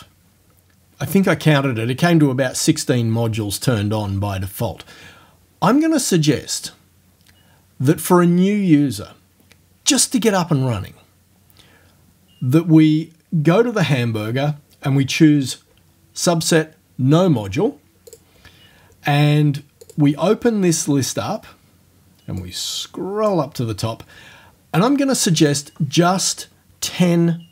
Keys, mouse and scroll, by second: 13.8 click, 18.1 click, 19.9 click, 22.4-23.5 drag.